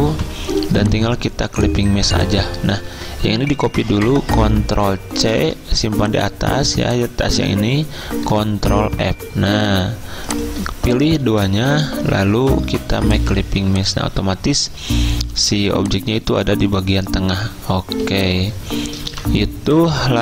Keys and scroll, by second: 3.0 ctrl+z, 5.4 ctrl+c, 7.7 ctrl+z, 8.9 ctrl+f, 11.7 ctrl+z, 15.5 z, 18.1 v, 20.1 z.